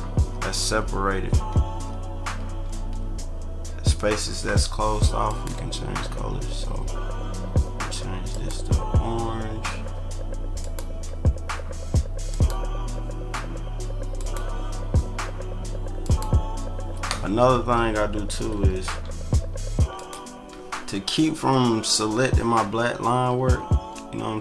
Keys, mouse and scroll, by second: 0.4 click, 1.2 ctrl+=, 1.8 click, 2.4 ctrl+=, 5.2 click, 8.3 click, 10.6 click, 12.3 click, 14.1 click, 16.0 click, 18.5 ctrl+-, 18.9 ctrl+-, 20.0 click, 22.5 ctrl+click, 22.9 ctrl+=.